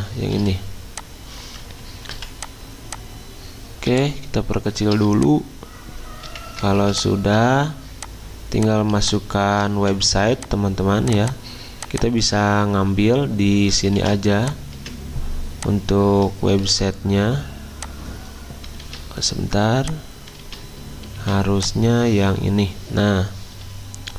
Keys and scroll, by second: 2.0-2.7 typing, 6.3 Escape, 6.7 z, 9.8 v, 14.0 ctrl+c, 14.7 Escape, 16.6 ctrl+f, 18.9 ctrl+z, 20.4 ctrl+z, 21.1 ctrl+2.